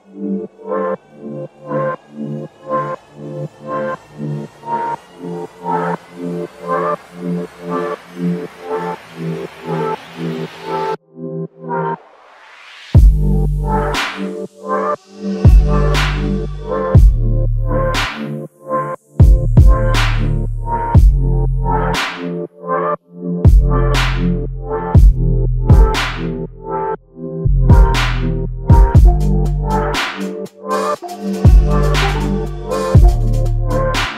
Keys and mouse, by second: 1.8 double click, 5.3 alt+click, 7.0 f, 7.9 ctrl+alt+click, 8.7 alt+click, 10.0 double click, 11.1 alt+click, 12.7 double click, 13.6 alt+click, 15.3 double click, 19.9 alt+click, 22.0 double click, 23.0 alt+click, 24.3 f, 26.1 alt+click, 27.7 f, 29.9 typing.